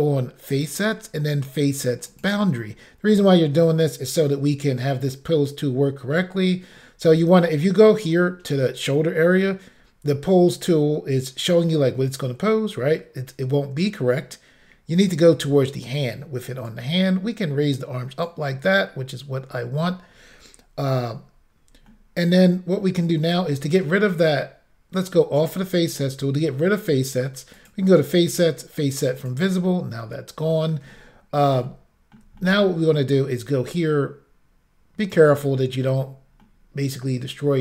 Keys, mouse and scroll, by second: 0.6 click, 2.1 click, 3.5-4.1 scroll down 1, 16.7 click, 21.0-21.6 scroll up 2, 21.9 middle click, 25.4 click, 27.6 click, 29.2 click, 30.0 middle click, 30.9 ctrl+middle click, 31.4 middle click, 31.7 shift+middle click, 32.4 middle click, 33.7 shift+click, 35.4 middle click, 36.4 middle click.